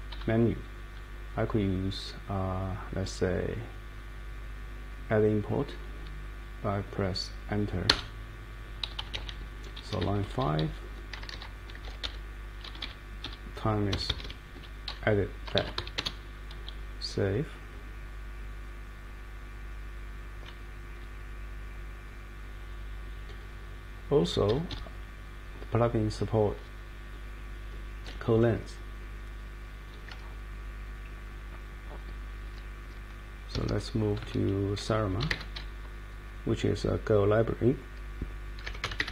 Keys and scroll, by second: 0.1 Down, 0.9 Up, 7.9 Return, 8.8 Page_Up, 10.0 Down, 10.6 Up, 11.3 shift+;, 11.8 5, 12.0 Return, 12.6 Down, 12.8 Down, 13.2 Up, 13.9 u, 14.1 u, 14.2 u, 15.3-16.2 typing, 17.5 Down, 17.7-19.5 Down, 21.0 Up, 21.5 Up, 21.6 Up, 21.7 Up, 22.2 Up, 22.7 Up, 24.2 Up, 32.4 super+Right, 32.8 super+Right, 33.5 Escape, 33.7 Escape, 34.2-35.8 typing, 38.4-39.1 typing.